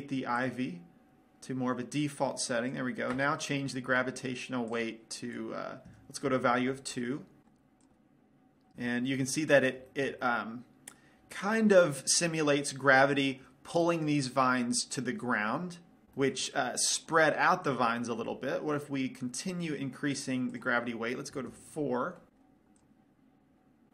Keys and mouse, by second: 5.2-7.1 drag, 8.3 click, 9.8 middle click, 10.7 middle click, 12.0 middle click, 13.1-15.1 middle drag, 16.6-18.7 middle drag, 21.0-22.5 drag, 22.5 middle click, 23.3 click.